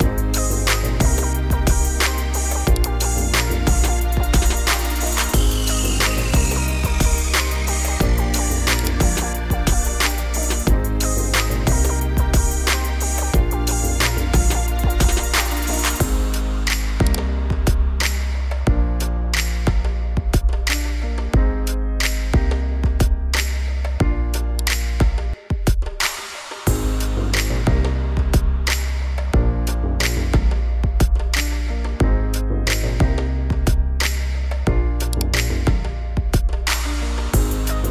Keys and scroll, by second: 0.8 Up, 5.5 -, 6.3 5, 6.7 0, 12.2 5, 12.8 0, 20.7 -, 21.3 5, 21.7 0, 25.8 1, 26.2 0.